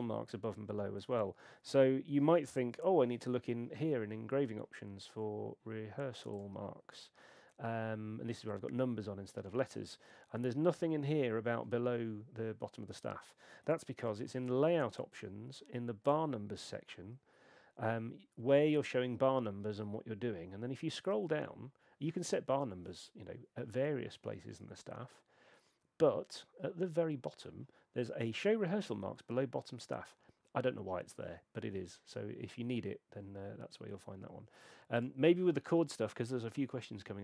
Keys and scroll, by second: 2.4 shift+super+e, 14.2 shift+super+l.